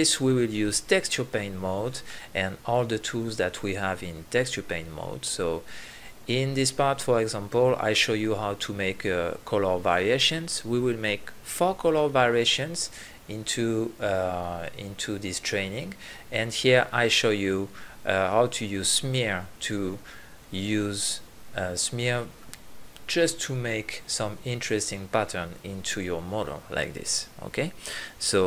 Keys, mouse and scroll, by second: 1.5 click, 4.0 ctrl+z, 5.9-7.4 middle drag, 8.7 drag, 9.7 KP_3, 11.5 ctrl+z, 12.4 drag, 13.4 ctrl+z, 13.7 ctrl+z, 18.6 drag, 18.8 middle click, 19.1-20.4 drag, 20.4-21.2 middle drag, 21.2-25.2 drag.